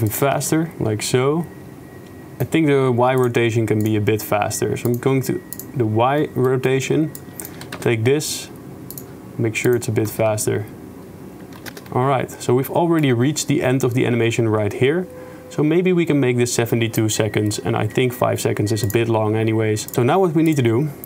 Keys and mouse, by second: 0.1 click, 0.4-2.4 shift+space, 2.4 click, 3.9 click, 6.2 click, 6.7 click, 7.2-7.6 drag, 7.6 g, 9.7 click, 10.1 shift+space, 13.0-14.3 drag, 14.3-17.0 middle drag, 18.9-19.4 drag, 19.9 ctrl+s, 19.9 shift+space, 20.5-21.0 drag.